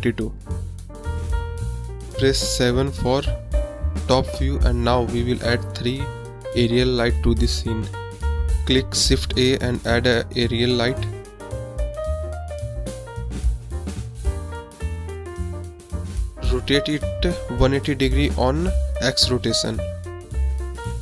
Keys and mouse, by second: 5.6 KP_7, 6.7 click, 7.3 KP_Decimal, 8.2 click, 11.3 shift+a, 17.4-17.9 drag, 20.2 click.